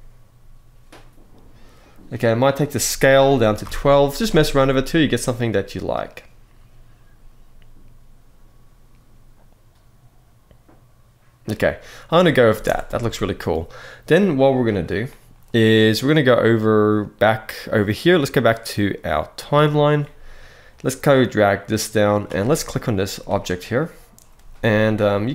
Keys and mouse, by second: 2.9 click, 12.6 alt+space, 12.8 alt+a, 17.5-19.6 drag, 21.3 click, 22.6 click, 24.9-25.3 middle drag.